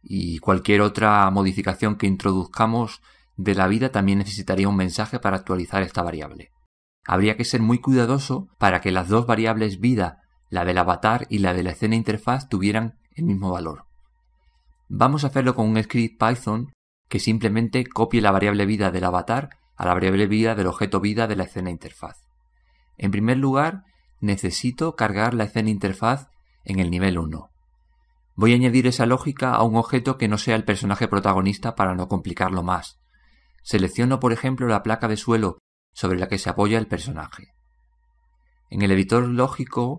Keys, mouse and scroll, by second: 35.5-37.3 right drag, 37.3 right drag.